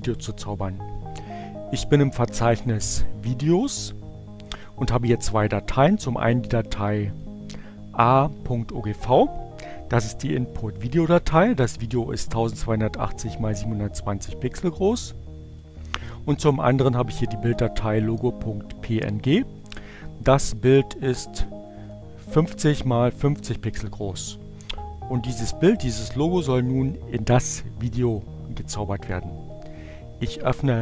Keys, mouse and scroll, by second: 2.7 click, 6.2 click, 10.1 click, 11.6 click, 13.2 click, 15.4 click, 17.4 click, 18.1 click, 18.2 right click, 20.9 click, 22.1 click, 23.3 click.